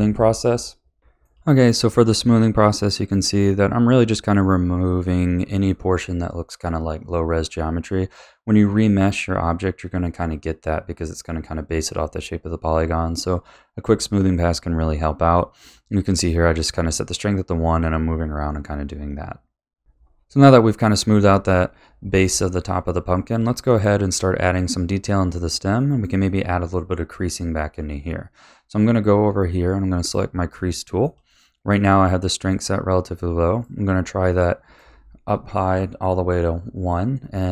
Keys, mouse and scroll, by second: 1.8 click, 2.1 click, 2.7 middle click, 3.0 click, 3.5 click, 3.8 click, 4.1 middle click, 4.3 click, 4.6 click, 4.9 click, 5.2 click, 5.4 middle click, 5.6 click, 5.9 middle click, 6.0 click, 6.3 middle click, 6.5 click, 6.9 middle click, 7.1 click, 7.6 click, 7.9 middle click, 8.1 click, 8.5 click, 8.8 middle click, 9.0 click, 9.2 middle click, 9.4 click, 10.7 middle click, 11.6 scroll up 1, 11.7 middle click, 12.4 click, 13.0 click, 13.4 middle click, 13.9 KP_Divide, 14.2 middle click, 14.4 click, 15.2 middle click, 15.4 click, 16.0 click, 16.8 middle click, 17.1 middle click, 17.5 click, 17.6 click, 17.7 middle click, 17.8 click, 18.0 click, 18.1 middle click, 18.2 click, 18.3 click, 18.4 middle click, 18.6 click, 18.7 click, 18.8 middle click, 19.1 middle click, 19.6 scroll up 2, 19.8-21.1 shift+middle drag, 22.2-22.7 scroll up 2, 22.7-24.7 middle drag, 24.7-25.7 scroll down 1, 25.7 scroll down 1, 25.7-28.7 middle drag, 30.0 click, 30.5-32.5 shift+middle drag, 32.5-34.3 drag, 34.3-36.2 middle drag, 36.2-37.5 drag.